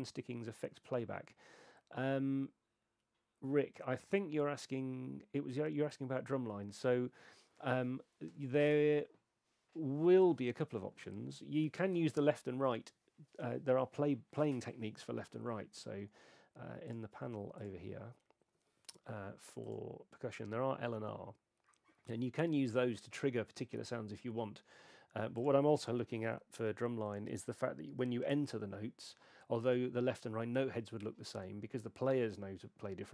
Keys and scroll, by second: 26.3 super+9.